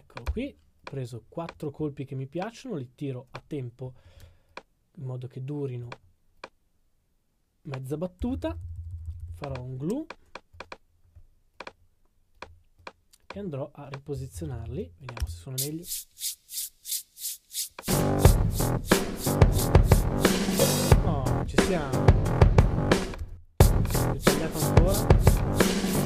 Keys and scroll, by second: 14.3 super+d, 21.3 super+d.